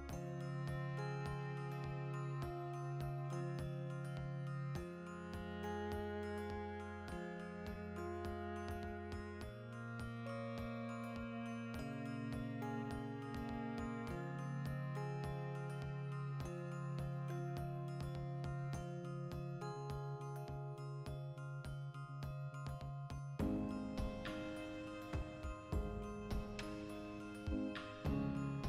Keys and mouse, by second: 0.3 Return, 0.8 g, 1.3 click, 1.4-3.0 ctrl+shift+middle drag, 2.2 g, 3.0 click, 3.1-4.9 ctrl+middle drag, 3.3 Tab, 3.7 a, 3.9 s, 4.9 click, 6.8 alt+o, 7.2-9.2 ctrl+shift+middle drag, 8.3 3, 9.0 2, 9.2-10.4 alt+shift+right drag, 10.4 ctrl+x, 10.9 3, 11.1 alt+right click, 11.6 ctrl+KP_Add, 12.5 alt+shift+right click, 13.0 g, 14.0 click, 14.2 g, 14.5 click, 14.6-22.5 middle drag, 20.9 alt+q, 22.3 3, 22.5 alt+right click, 22.7 alt+q, 23.0-27.1 shift+middle drag, 26.9 2, 27.1 alt+shift+right click, 27.7 ctrl+x, 28.0 alt+right click.